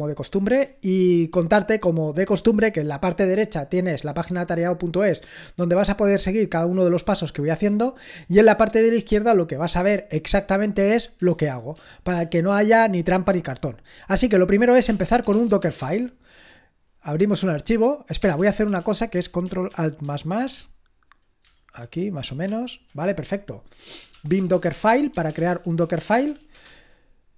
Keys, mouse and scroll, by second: 11.3 super+h, 11.7 super+l, 12.2 super+l, 14.7-16.3 typing, 18.2-18.8 typing, 20.1 ctrl+alt++, 21.5 ctrl+alt++, 23.8-27.0 typing.